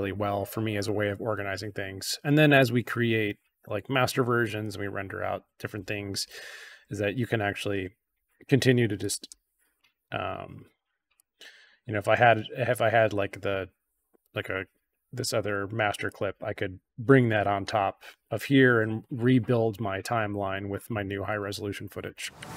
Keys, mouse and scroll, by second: 6.3 scroll down 2, 6.9-7.8 scroll up 4, 8.9-9.7 shift+drag, 11.1-11.5 drag, 15.4-16.0 drag.